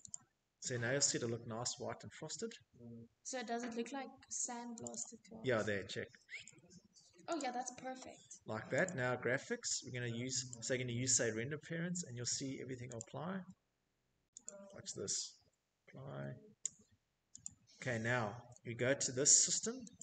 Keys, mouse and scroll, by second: 2.0 click, 2.1 click, 4.5 click, 6.0 click, 7.6 click, 10.1 click, 10.6 click, 11.6 click, 14.5 click, 17.1 click, 18.0 click, 19.9 click.